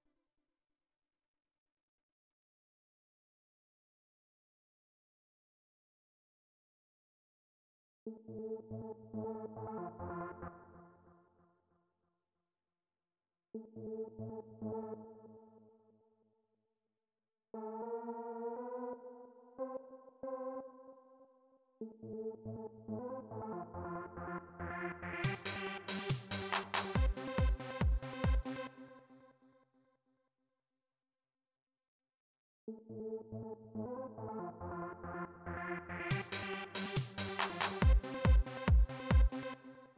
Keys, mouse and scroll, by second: 2.0-4.0 drag, 4.9-6.5 drag, 6.8 space, 7.8 space, 10.2 space, 11.2 click, 13.3 space, 14.7 space, 17.2-18.8 drag, 19.3 click, 20.6 right click, 21.5 space, 22.1 click, 24.0 click, 25.6-26.8 drag, 28.1 click, 29.5 click, 31.1 click, 32.1 space, 33.5 click, 33.8 click, 36.7-39.7 drag.